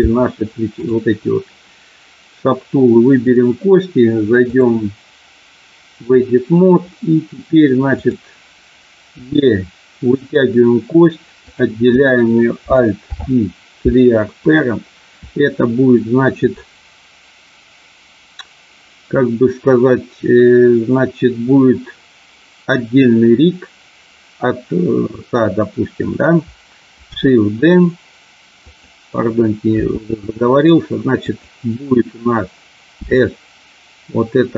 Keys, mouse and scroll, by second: 0.6 click, 4.5-6.1 drag, 9.2 e, 10.2 click, 12.9 alt+p, 27.2 g, 28.7 click, 29.8 r, 31.2 click, 32.9 s.